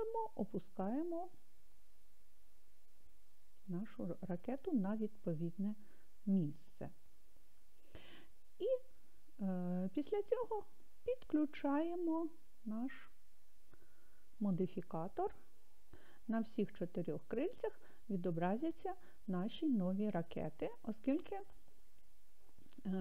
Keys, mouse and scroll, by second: 3.7 click, 12.0 click, 14.5 click.